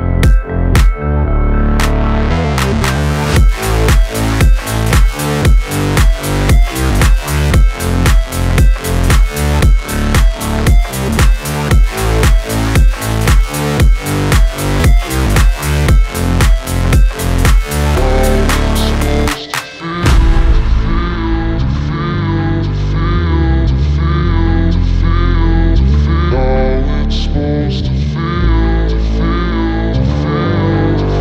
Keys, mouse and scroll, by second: 0.1 click, 0.5 p, 1.0 alt+click, 1.7 ctrl+v, 2.3 click, 2.6 space, 4.6 click, 6.8-11.3 drag, 11.5 space, 13.6 space, 14.8-17.5 drag, 19.5 space, 20.2-20.7 scroll down 1, 22.0 space, 22.6-24.6 drag, 24.6 space, 26.3 click, 27.4 Right, 28.5 click, 28.9 space.